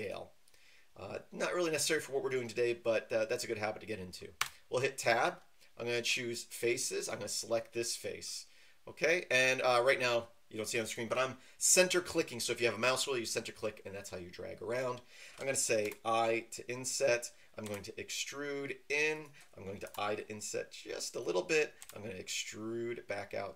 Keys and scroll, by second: 4.4 Tab, 15.8 i, 17.6 e, 19.8 i, 21.8 e.